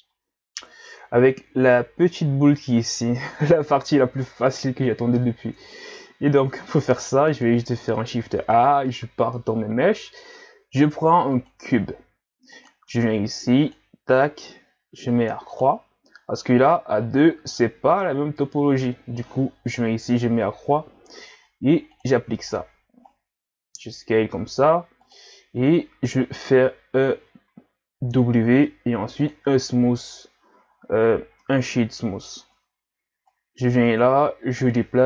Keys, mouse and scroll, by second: 0.6 KP_1, 5.6 Tab, 6.3 scroll down 1, 7.0 shift+a, 12.5-18.5 drag, 19.6-23.1 drag, 23.1-23.6 scroll up 3, 23.6 s, 28.7 w, 30.7-31.4 scroll up 2, 31.4-32.4 middle drag, 32.4 Tab, 33.3-35.0 drag.